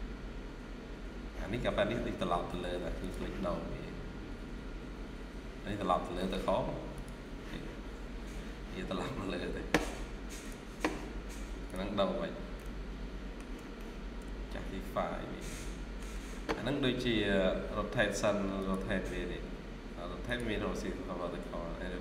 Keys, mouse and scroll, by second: 3.8 scroll up 1, 5.6 scroll down 1, 6.0 middle click, 7.8-8.9 scroll up 1, 9.0-9.6 scroll down 1, 12.1 scroll down 1, 12.5 middle click, 13.6 middle click, 16.3-16.8 scroll down 1, 21.4 scroll up 1.